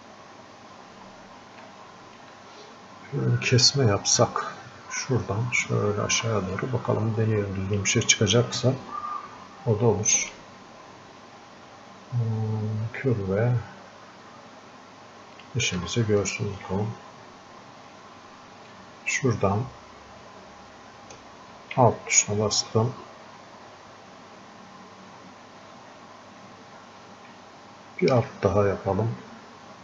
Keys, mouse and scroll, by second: 0.0 scroll up 1, 0.2 scroll down 1, 1.7-6.6 alt+drag, 6.6-10.3 drag, 15.4 ctrl+click, 18.8-28.7 ctrl+shift+drag.